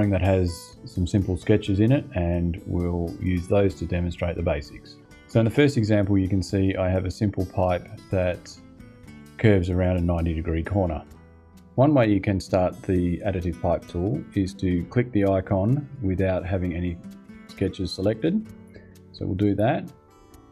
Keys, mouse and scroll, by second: 19.1 click.